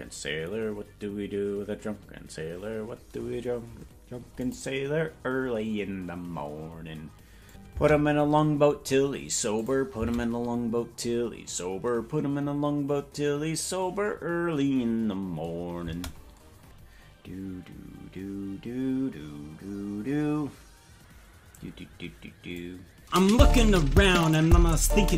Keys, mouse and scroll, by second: 16.7 scroll down 5, 16.7 space, 22.7 click.